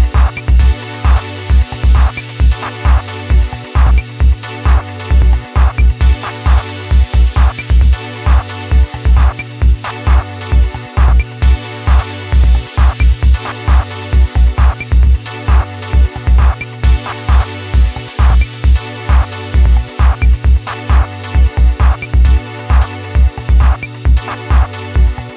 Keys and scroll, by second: 10.8 [, 11.0 [.